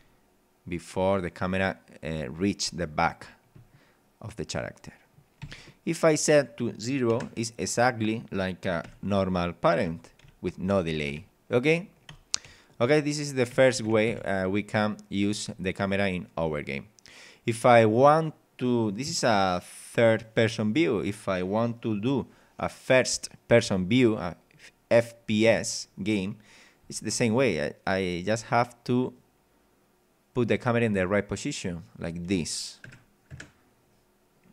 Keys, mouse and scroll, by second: 5.4 Escape, 6.4 click, 7.1 KP_0, 7.6 click, 8.6 click, 8.8-13.4 typing, 14.1 Escape, 14.4 scroll down 1, 14.8 middle click, 16.4-18.0 middle drag, 25.4 f, 26.8 g, 29.0 click, 31.3-32.3 drag, 32.8 Right, 33.3 KP_0.